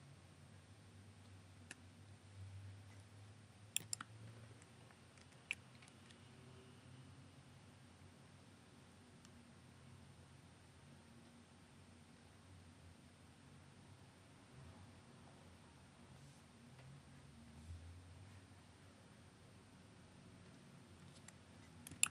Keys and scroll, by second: 5.2 super+F9.